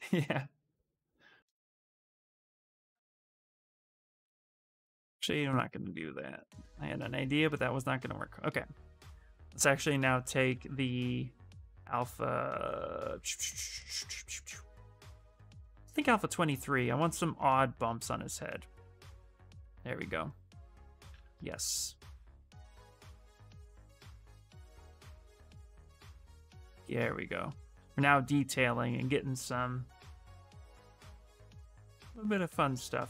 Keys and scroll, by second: 4.6 ctrl+z, 4.7 ctrl+z, 5.4 ctrl+z, 6.2 ctrl+z, 16.6 s, 21.2 s.